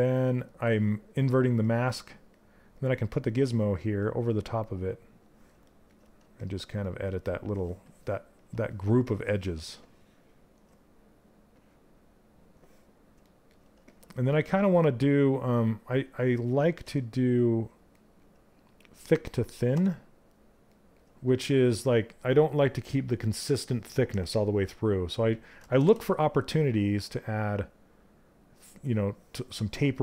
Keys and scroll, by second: 16.4 q.